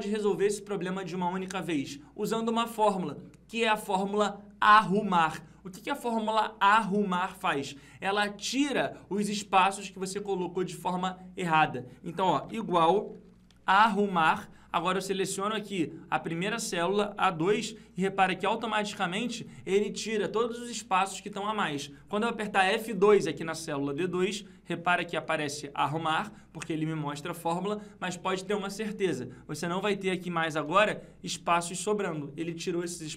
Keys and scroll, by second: 24.2 F2, 30.9 F2.